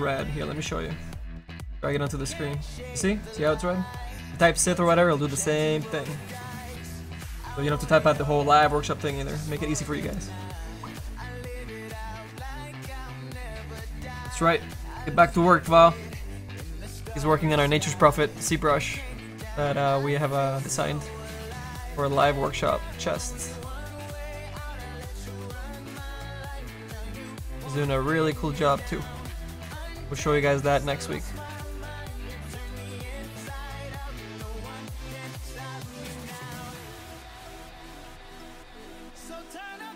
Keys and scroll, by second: 30.3 s, 33.5 s.